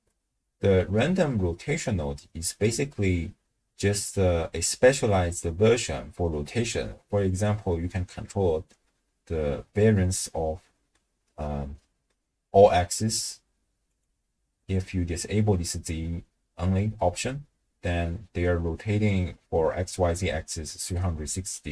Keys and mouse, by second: 11.0-12.1 middle drag, 13.9 click.